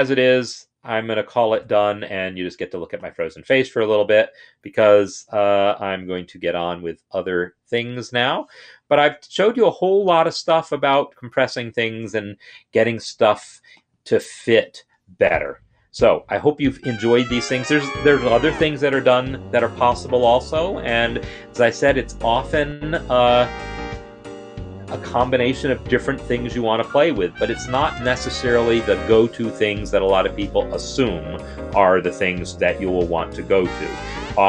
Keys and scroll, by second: 5.9 ctrl+F10, 8.8 End, 8.9 Down, 9.0 Down, 9.2 Down, 9.3-10.9 Down, 15.2 space.